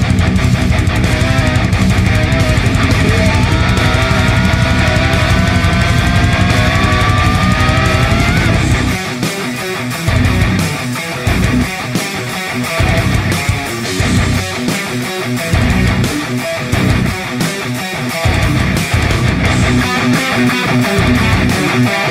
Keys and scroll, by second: 1.1-1.9 space, 4.4 ctrl+r, 9.2 space, 9.7 space, 9.9 space, 10.0 space, 11.2 l, 14.1 s.